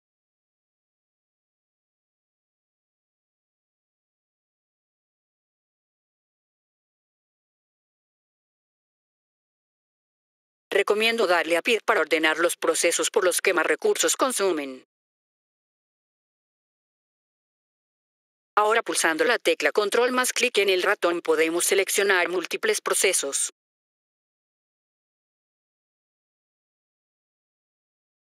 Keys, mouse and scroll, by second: 0.9 click, 6.0 F3, 7.1 click, 9.9 F3, 10.5 click, 15.1 click, 17.6 F3, 18.3 click, 20.9 click, 27.2 click.